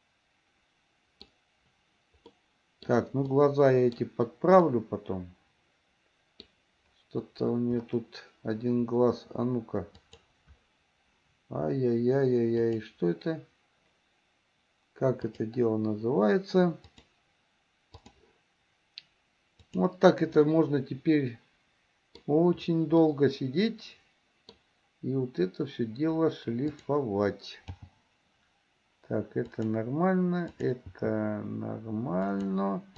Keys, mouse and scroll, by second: 2.4-3.1 middle drag, 3.5 middle click, 4.9-6.7 middle drag, 10.1 click, 12.8 click, 15.4 click, 17.1-18.4 drag, 19.7-20.0 drag, 20.6-22.4 middle drag, 23.2-24.8 middle drag, 26.7 click, 28.0 g, 30.6 click, 31.2 g.